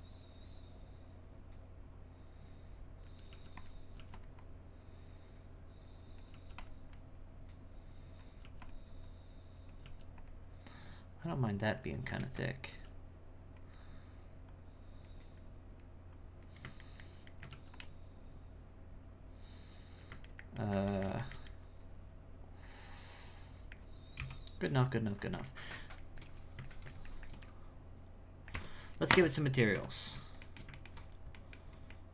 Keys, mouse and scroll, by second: 4.0 f, 4.4-6.3 drag, 6.9-8.4 drag, 9.1 click, 10.7-12.2 drag, 12.2 ctrl+z, 14.5-16.9 drag, 16.9 ctrl+middle click, 19.1-20.3 drag, 20.3-24.1 ctrl+middle drag, 24.1 KP_1, 26.1-28.5 shift+middle drag, 28.5 Tab, 30.4 shift+middle click, 31.1 scroll up 1, 31.3-32.1 middle drag.